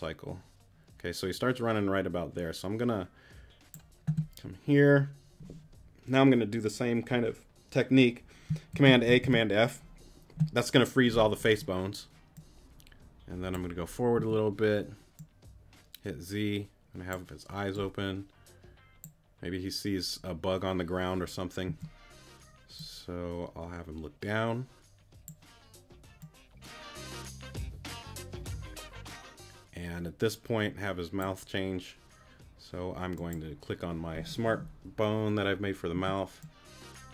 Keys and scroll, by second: 8.7 super+a, 9.2 super+f, 14.2 z, 21.7 z, 35.9 Right.